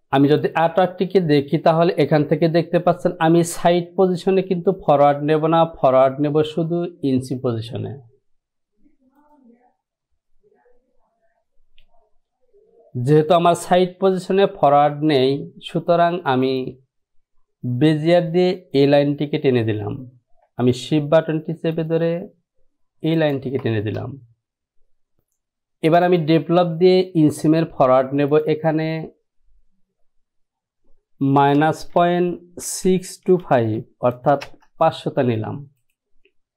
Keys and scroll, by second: 31.6 KP_Subtract, 32.1 KP_Decimal, 32.8 KP_6, 33.7 n, 34.6 Return.